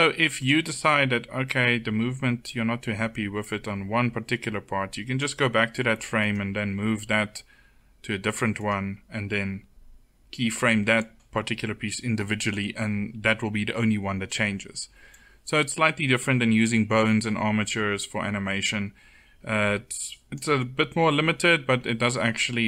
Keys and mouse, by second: 2.4-6.0 drag, 6.2 e, 6.9 r, 14.9-16.7 drag.